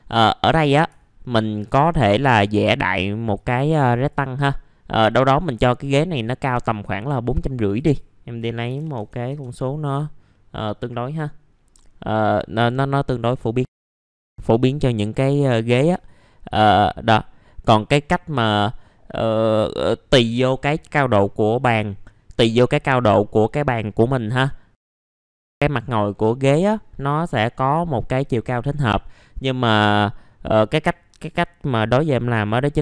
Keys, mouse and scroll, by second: 0.4 middle click, 1.3 ctrl+right click, 2.4 click, 3.8-4.8 drag, 4.8 scroll down 1, 5.1 middle click, 7.6 click, 8.7 KP_4, 10.3 middle click, 13.6 right click, 13.8 middle click, 13.9 scroll up 1, 14.0 click, 14.1 middle click, 14.5 click, 15.7 w, 16.0-16.3 scroll up 1, 16.5 click, 18.0 middle click, 23.5 click, 25.2-32.8 drag.